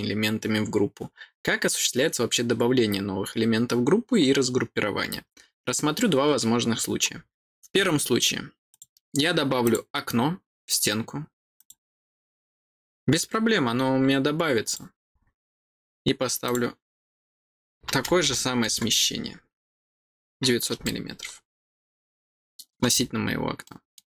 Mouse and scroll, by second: 8.7 click, 9.6 click, 11.5 click, 14.6 click, 16.4 click, 20.8-22.7 middle drag, 23.0 scroll down 2, 23.2 scroll up 2, 23.6 middle click.